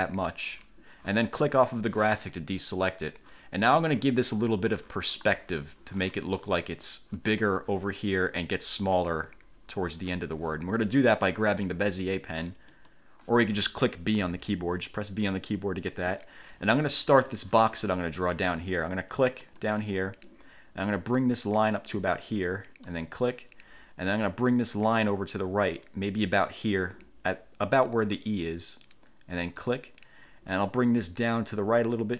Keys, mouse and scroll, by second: 1.6 click, 12.9 click, 14.4 b, 19.6 click, 23.0 click, 29.8 click.